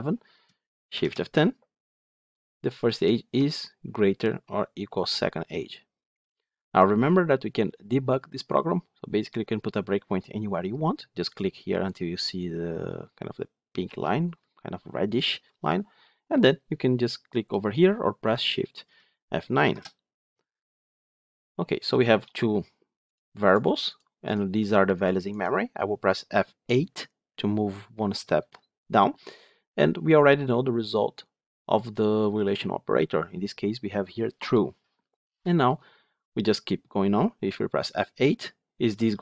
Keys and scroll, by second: 0.8 shift+F10, 11.2 ctrl+F8, 19.5 shift+F9, 28.3 F8.